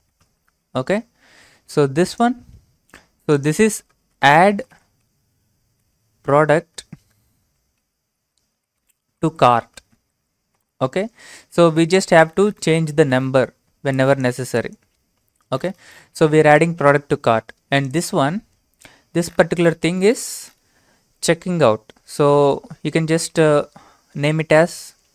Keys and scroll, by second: 0.0-0.7 typing, 4.1-10.5 typing.